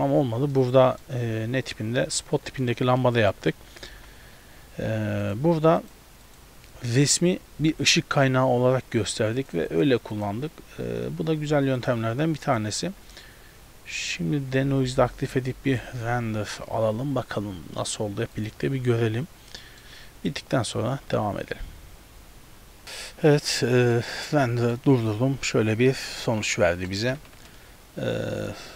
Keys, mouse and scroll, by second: 3.1 middle click, 3.9 z, 5.3 click, 5.8 click, 9.4 click, 9.7 click, 10.2 click, 11.8 click, 12.5 click, 13.1-14.0 scroll down 2, 14.0 click, 14.0-15.5 scroll down 1, 16.1 F12.